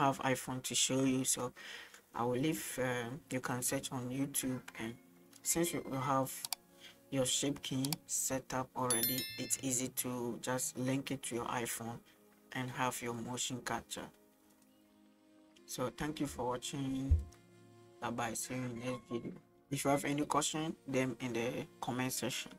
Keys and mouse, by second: 2.3 middle click, 14.4-14.7 middle drag.